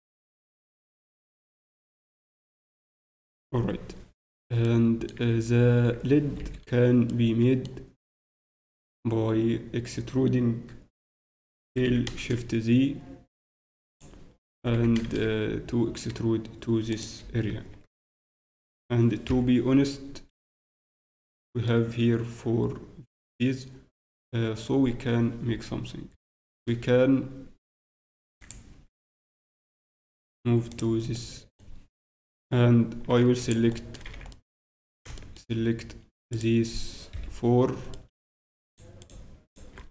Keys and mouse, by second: 3.9-8.0 middle drag, 5.1 z, 8.8 middle click, 13.1 e, 17.0-18.7 drag, 17.0 e, 17.2 f, 18.2 Tab, 31.1 ctrl+click, 33.4-35.3 drag, 34.0 z, 34.7 z, 36.3 right click.